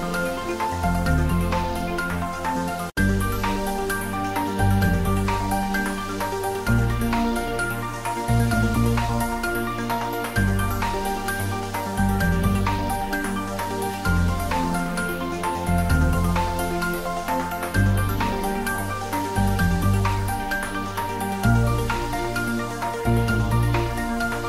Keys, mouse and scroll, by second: 0.3 shift+a, 2.1 click, 2.7 ctrl+middle click, 3.6 ctrl+z, 4.6 shift+a, 6.0 click, 6.5 ctrl+click, 6.7 ctrl+middle click, 7.5 s, 8.6 click, 8.8 ctrl+middle click, 9.9 click, 10.2 ctrl+middle click, 11.1 shift+middle click, 11.7 s, 12.2 click, 12.6 z, 13.1 click, 13.2 click, 15.8 click, 19.6 click.